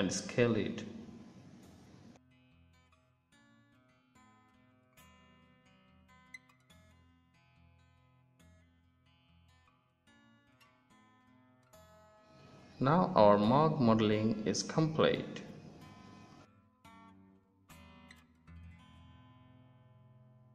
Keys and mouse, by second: 1.1 s, 4.2 click, 6.7 Tab, 7.5 ctrl+s, 10.8 z, 12.8 ctrl+s, 14.7 middle click, 16.4 ctrl+s, 18.8-19.7 middle drag.